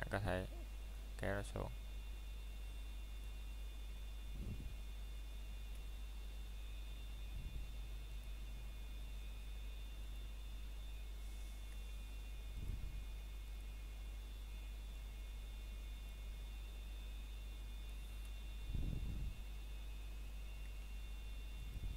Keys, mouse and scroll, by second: 0.2-0.5 scroll up 1, 1.5 click, 2.0 scroll down 1, 2.4 middle click, 3.3 click, 3.8 scroll down 1, 5.0 ctrl+Tab, 5.8 click, 7.1 scroll up 1, 8.2 click, 9.8 scroll down 1, 10.2 middle click, 12.0 scroll up 1, 14.2 ctrl+Tab, 15.2 click, 17.5 scroll down 1, 18.2 shift+middle click, 18.5-19.0 scroll up 1, 19.1 shift+middle click, 19.5 shift+scroll up 1, 21.7-21.9 scroll up 1.